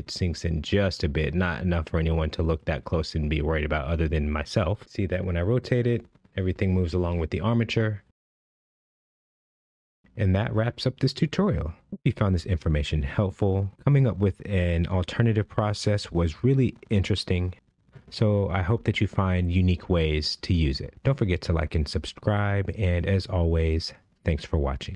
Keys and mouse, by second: 0.4 shift+middle drag, 0.9-1.2 middle drag, 1.4 shift+middle click, 2.3-5.3 middle drag, 5.5 space, 6.0-7.4 middle drag, 7.5 space, 7.6 middle drag, 8.2-9.3 middle drag, 9.3 space, 9.7-11.5 middle drag, 12.8-13.4 middle drag, 14.1-15.1 middle drag, 15.4 click, 15.8-16.8 middle drag, 17.5 KP_1, 18.5 shift+middle drag, 19.1 space, 24.7 space.